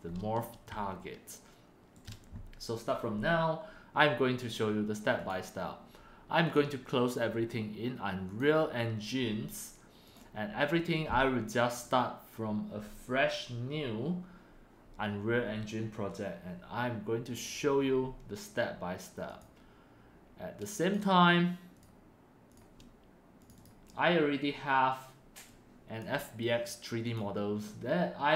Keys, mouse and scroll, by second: 1.2 middle click, 1.8-4.7 shift+right drag, 5.1 shift+middle click, 6.4 click, 7.0 click, 8.2 click, 8.7 click, 9.2 click, 10.0 click, 12.0 drag, 19.3 click, 19.8 click, 20.2 click, 21.5-22.1 drag, 22.3-23.5 drag, 25.4 click, 25.9-28.3 drag.